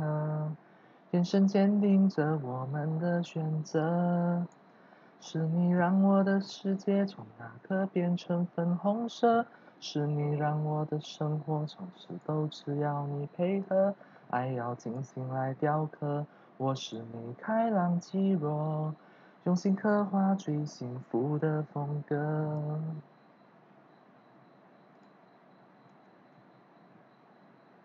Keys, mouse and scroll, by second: 3.8 click, 5.7 click, 12.1 click, 13.5 click, 14.8 click, 15.9-16.9 drag, 21.5 click, 22.4 click, 24.9 click, 25.9 click.